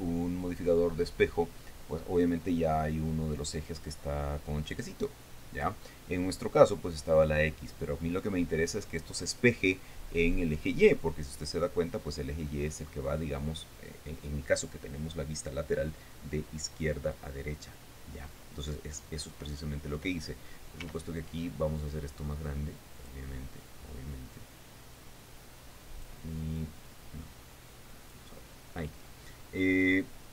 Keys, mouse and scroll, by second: 5.2 click, 6.1 click, 12.5 scroll up 1, 13.7 scroll down 1, 21.4 s, 23.5 click, 24.9-26.8 drag, 27.1-28.9 drag.